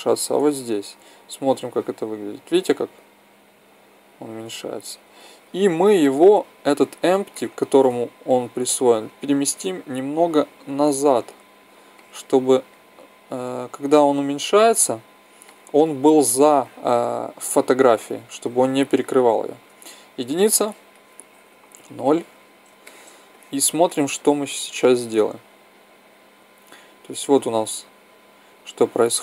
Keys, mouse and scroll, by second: 0.5 Tab, 1.5-3.3 drag, 5.9 middle click, 6.1 middle click, 8.6-10.1 right drag, 10.3-11.9 drag, 12.0-13.6 middle drag, 15.3-17.1 middle drag, 19.5 KP_1, 21.5 KP_0, 25.7-27.5 drag, 27.7 middle click.